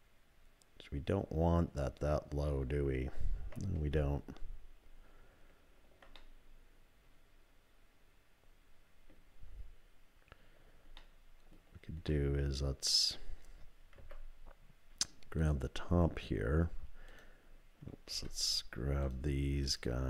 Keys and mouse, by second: 0.2-2.5 middle drag, 3.8 ctrl+z, 6.2-9.1 middle drag, 11.0 middle click, 12.1 click, 14.0 2, 15.4 click, 17.1 click, 18.1 3, 19.7 shift+click.